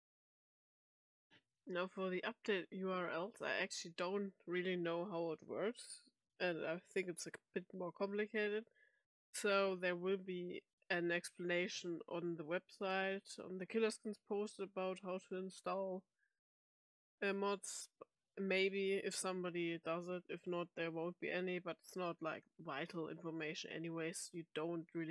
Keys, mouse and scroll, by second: 1.2 click, 24.0 click.